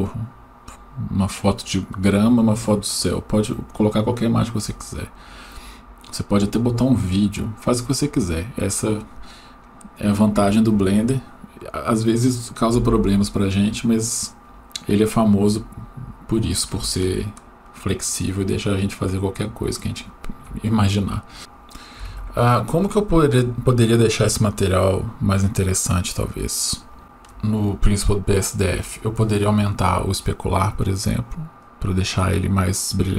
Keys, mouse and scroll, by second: 15.8-16.8 scroll down 1, 17.0-20.2 shift+middle drag, 26.6-27.3 scroll up 2, 27.0 shift+middle click, 27.6-29.3 scroll up 3, 29.8-33.0 drag.